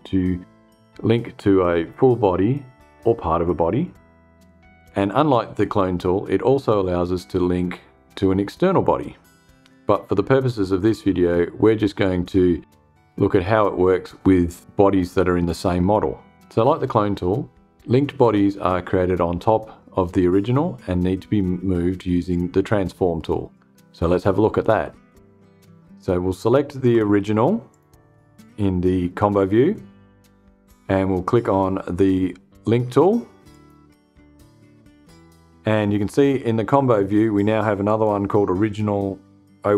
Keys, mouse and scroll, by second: 27.2 click, 33.0 click, 37.4 click.